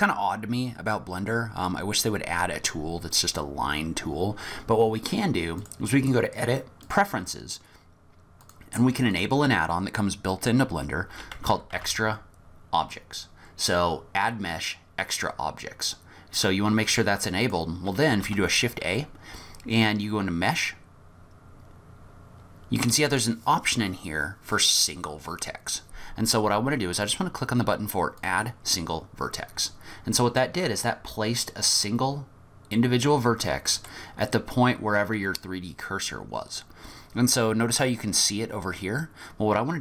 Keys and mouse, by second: 5.7-7.0 drag, 18.3 shift+a, 29.7 middle click, 30.7 middle click, 31.3-33.9 middle drag, 35.3 middle click.